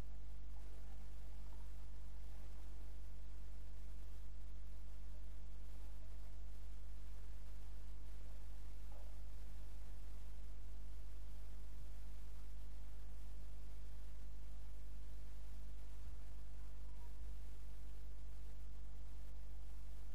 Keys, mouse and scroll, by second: 1.5-4.4 middle drag, 4.9 click, 9.2 click, 14.2 click, 16.0 g.